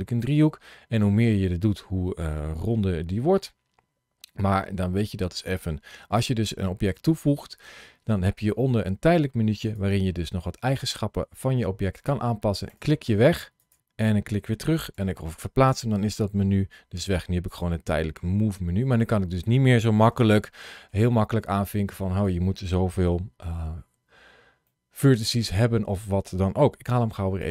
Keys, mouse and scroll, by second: 9.6 click, 12.5 click, 14.8 g, 15.5 click, 17.3 click, 18.8-20.0 scroll up 1, 20.1 shift+middle click, 21.1 scroll down 2, 21.6 shift+middle click, 23.3 KP_Decimal, 26.7 x.